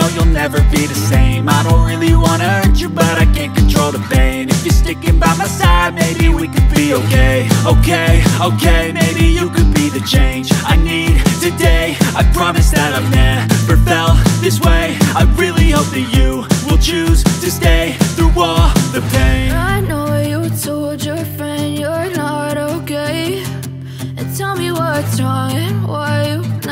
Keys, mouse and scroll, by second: 1.2 alt+scroll up 1, 1.5 alt+click, 5.1-5.4 alt+scroll down 1, 5.5 space, 5.5 click, 6.0 alt+scroll up 1, 7.1 alt+click, 8.0 alt+scroll down 1, 8.4 click, 8.7 space, 9.9-10.5 typing, 10.5 alt+click, 12.3 alt+scroll down 1, 13.8 alt+scroll up 1, 14.0 typing, 15.5 alt+click, 18.0 alt+scroll down 1, 19.1-19.5 alt+scroll up 1, 22.1 click.